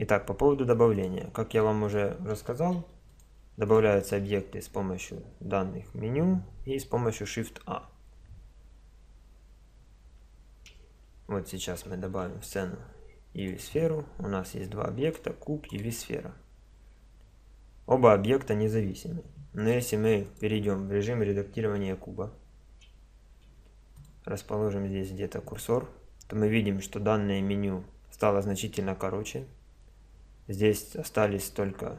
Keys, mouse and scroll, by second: 0.9-2.8 drag, 2.8 x, 3.7-5.4 drag, 11.5 click, 11.9 shift+a, 15.0-17.5 right drag, 17.5-20.2 middle drag, 20.2 right click, 21.8 Tab, 24.0-25.3 drag.